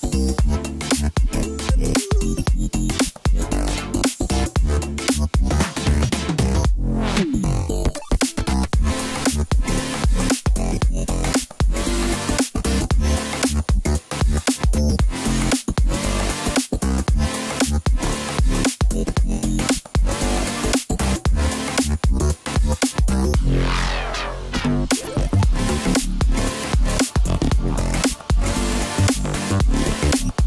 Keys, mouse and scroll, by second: 1.5 scroll down 1, 2.3 middle click, 3.2-3.9 scroll up 4, 3.9-4.2 scroll down 3, 4.2 middle click, 5.1 Tab, 5.8 KP_7, 6.6-8.1 scroll down 1, 8.1 drag, 8.5-9.4 scroll up 1, 9.4 g, 12.8-13.2 scroll down 2, 13.2-13.8 middle drag, 13.8-14.1 scroll up 2, 14.1-15.4 middle drag, 15.4 click, 15.8-16.1 scroll up 2, 16.1-16.5 scroll down 1, 16.5-17.4 middle drag, 17.4 scroll down 3, 17.7-20.6 middle drag, 20.6-23.6 drag, 23.6 s, 26.0 KP_7, 26.9-27.5 scroll up 1, 27.5 s, 28.3 click, 28.8 s.